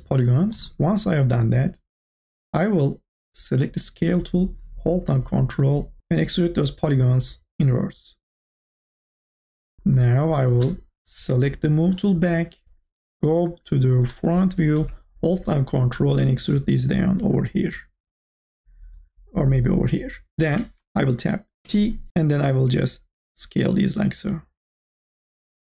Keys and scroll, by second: 6.0 ctrl+z, 21.6 t, 22.1 ctrl+z.